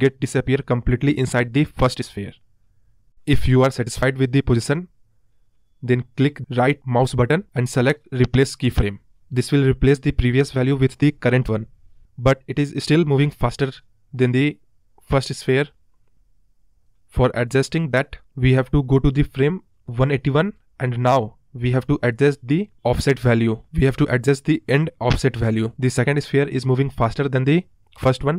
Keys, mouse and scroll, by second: 8.3-9.5 right drag, 9.5-10.9 scroll down 13, 10.9 space, 13.1 space, 13.4 space, 14.0 space, 14.6-22.7 drag, 23.5 right click, 24.2-25.0 drag, 25.0-25.6 scroll up 2, 25.6-26.3 scroll down 1, 26.3 space, 27.3-28.0 drag, 28.0 Left.